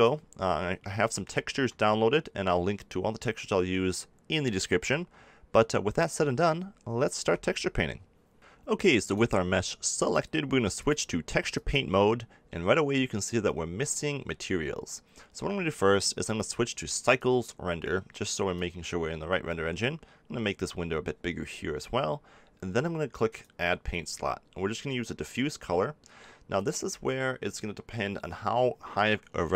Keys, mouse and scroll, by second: 0.0 Tab, 1.0-7.2 middle drag, 7.2 a, 11.7-18.1 drag, 18.5-20.4 drag, 23.3-25.2 drag.